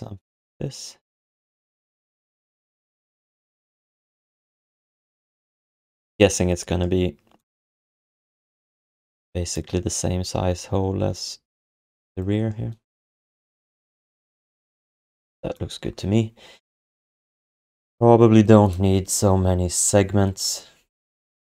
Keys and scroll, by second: 13.5 f, 21.1 f.